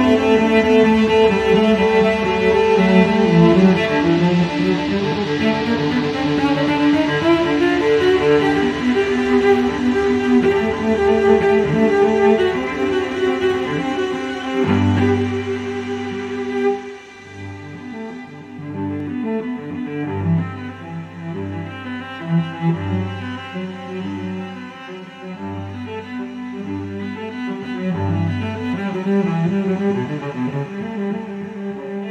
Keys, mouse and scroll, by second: 9.9-10.3 scroll down 2, 10.9 scroll up 2, 12.6 click, 14.0 click, 17.4 click, 17.9 click, 18.6 click, 19.3 click, 20.2 click, 21.4 click, 24.1 click, 25.2 click, 27.6 click, 30.7 click.